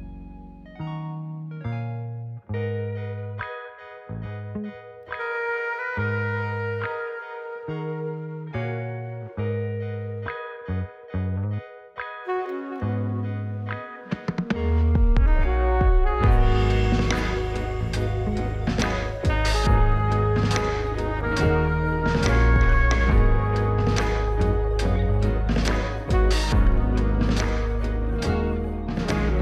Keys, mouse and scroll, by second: 0.5 click, 0.6-0.9 middle drag, 0.9 scroll down 2, 1.1-1.8 middle drag, 2.0 click, 2.4-2.9 middle drag, 2.9-3.6 scroll up 1, 3.6 click, 6.2 click, 7.4 click, 8.3-9.6 drag, 20.1 click, 21.3-22.1 drag, 23.2-26.1 middle drag, 26.1 click, 27.0-29.4 drag.